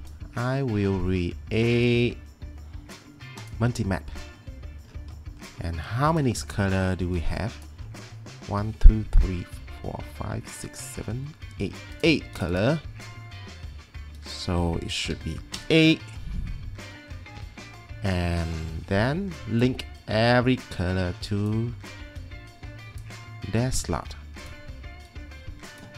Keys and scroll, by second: 15.1 8, 15.6 Return.